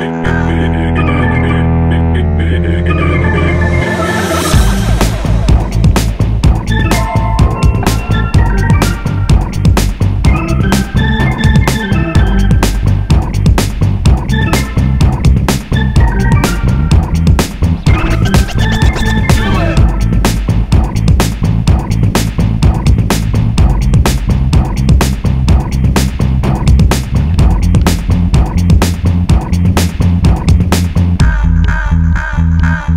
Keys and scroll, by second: 0.0 super+c, 0.1 super+v, 22.9 Down, 23.2 Down.